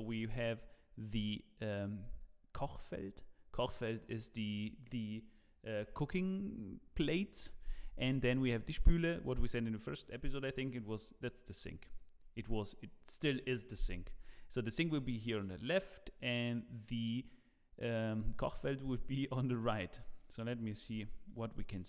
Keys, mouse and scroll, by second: 19.9 middle click, 20.9 z, 21.2 middle click.